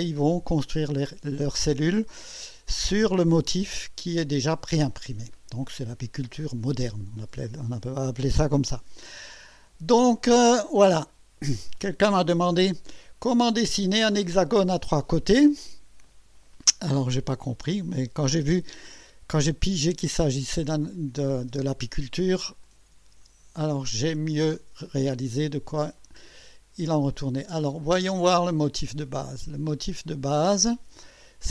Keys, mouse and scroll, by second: 9.3 click, 10.5 scroll down 2, 12.6-14.0 drag, 17.3 click, 20.3 space, 21.1 click, 21.5 space, 22.6 click, 23.1 space, 26.0 click, 27.4 click, 27.9 space, 29.1-29.8 right drag, 29.9 scroll up 1, 30.7-31.3 right drag, 31.4 scroll up 1.